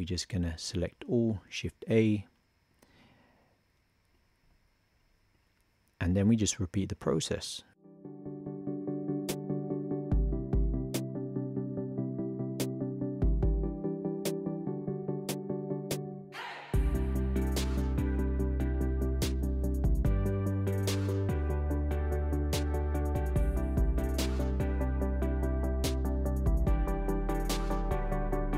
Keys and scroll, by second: 1.6 shift+a, 7.8 super+/, 8.4 super+c, 8.5 super+v, 8.9 super+v, 9.6 shift+a, 10.1 super+/, 10.5 super+c, 10.6 super+v, 11.0 shift+r, 11.3 shift+a, 12.4 super+/, 12.9 shift+y, 13.1 super+c, 13.9 shift+a, 14.4 super+/, 14.7 super+c, 15.0 super+v, 15.1 shift+g, 15.7 shift+a, 18.1 shift+a, 20.2 super+c, 23.0 super+v, 24.9 shift+b, 26.1 shift+b, 26.8 shift+b, 27.7 shift+b.